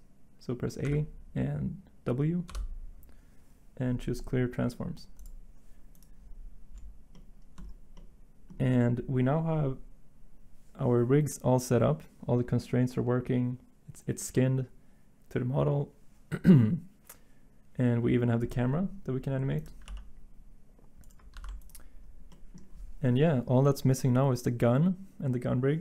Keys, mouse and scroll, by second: 0.8 a, 2.5 w, 19.9 g, 21.3 ctrl+z.